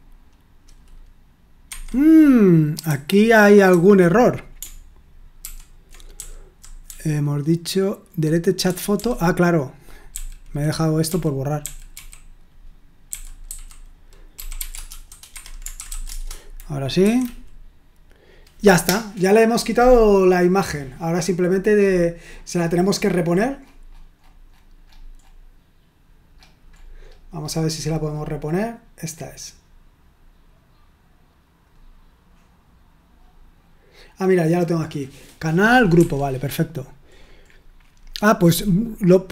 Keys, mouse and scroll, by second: 1.6 Escape, 2.8-3.7 typing, 5.4 ctrl+u, 6.1-8.6 typing, 10.1-11.9 typing, 13.0-16.4 typing, 17.0 F5, 29.0-31.6 right drag, 31.6-32.6 drag, 35.9 Escape, 37.1-38.6 scroll down 1, 38.6 click, 39.2 click.